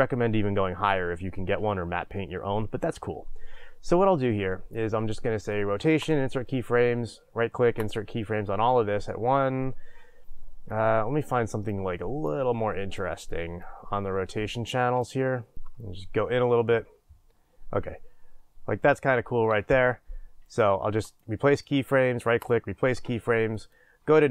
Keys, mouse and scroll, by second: 6.1-10.8 right drag, 10.8-15.5 drag, 15.5-21.2 shift+middle drag, 15.8 scroll up 2, 21.2-23.5 right drag, 23.5 click.